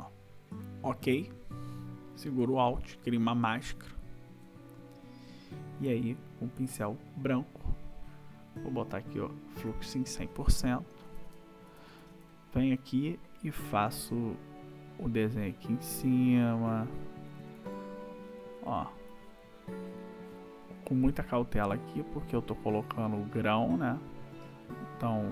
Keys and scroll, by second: 11.1 \, 15.4 ], 17.3 ], 20.7 ].